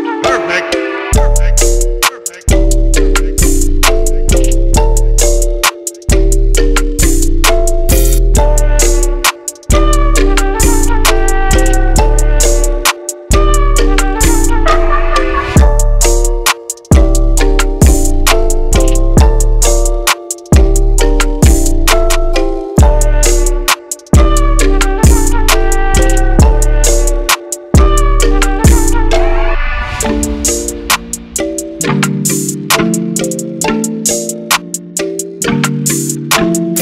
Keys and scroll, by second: 1.5-4.3 typing, 8.8-9.7 typing, 10.2 Return, 11.6-12.6 typing, 21.3-22.3 typing, 24.7-25.4 typing.